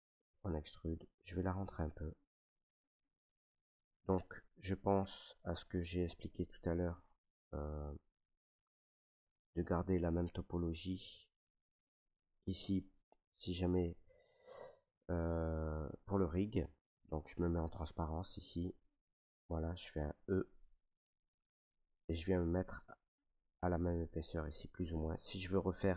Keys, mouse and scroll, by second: 3.8 right click, 4.0 middle click, 4.1 middle click, 4.1 middle click, 4.9 middle click, 5.2 middle click, 5.7 ctrl+z, 6.1 ctrl+z, 7.5 middle click, 7.8 middle click, 7.8 middle click, 7.9 middle click, 8.0 middle click, 9.4 ctrl+right click, 10.0-10.5 scroll, 11.3 ctrl+right click, 12.1 scroll, 12.9 middle click, 14.1 shift+middle click, 16.0 middle click, 16.7 shift+middle click, 16.9 middle click, 16.9 middle click, 17.0 shift+middle click, 18.8 click, 19.7 middle click, 24.6 click, 24.6 e.